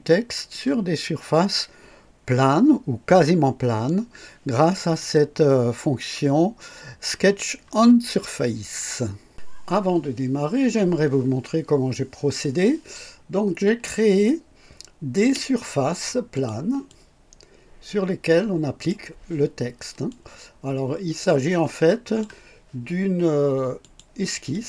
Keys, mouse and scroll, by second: 0.9 scroll down 2, 12.1 scroll down 2, 15.2 space, 16.4 click, 16.9-19.1 drag, 20.1-22.4 drag, 23.8 click, 24.5 click.